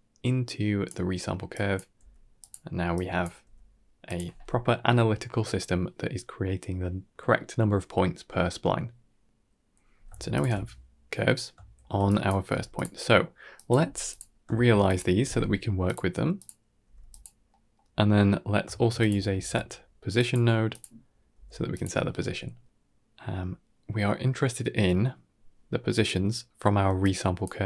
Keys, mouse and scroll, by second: 1.4 click, 2.4 g, 2.8 click, 3.3 g, 8.8-9.3 scroll down 4, 9.3-9.9 middle drag, 10.2 alt+shift+click, 11.4 shift+middle click, 11.9 click, 12.4 g, 12.9 middle click, 13.4 click, 13.7 g, 14.4 shift+a, 16.7 g, 17.4 middle drag, 18.6 shift+a, 21.2 g, 22.0-22.4 scroll down 3, 22.4-25.2 middle drag, 26.1 middle click, 26.9 click.